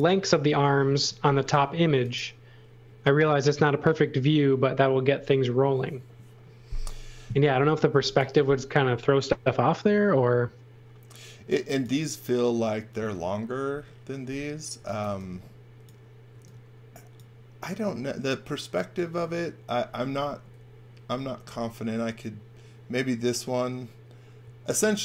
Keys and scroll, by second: 1.9 x, 7.9 x, 8.1 v, 14.7 x, 15.0 v, 16.3 x, 24.4 x.